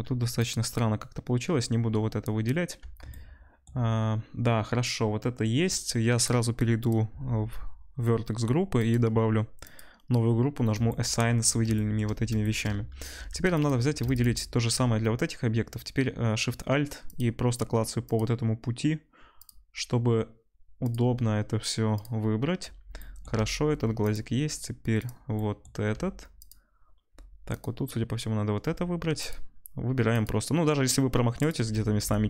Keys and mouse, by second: 0.2-3.1 ctrl+drag, 4.5-8.7 shift+drag, 8.7-10.7 middle drag, 12.6 middle click, 13.1 2, 14.0 alt+shift+click, 14.1 alt+shift+click, 14.5-17.1 alt+shift+drag, 19.3 alt+shift+click, 20.8 alt+shift+click, 21.9 alt+shift+click, 22.9-26.3 shift+drag, 24.1 alt+shift+middle click, 24.1 alt+shift+right click, 26.3 alt+shift+middle click, 26.4 alt+shift+click, 27.5 shift+click, 29.1 alt+shift+click, 30.2 alt+shift+click.